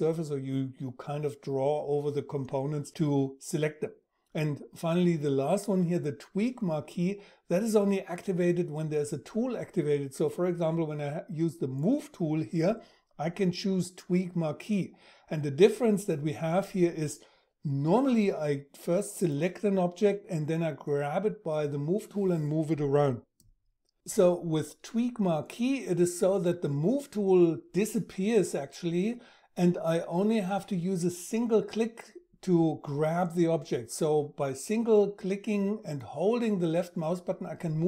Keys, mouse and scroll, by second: 36.2-37.8 drag.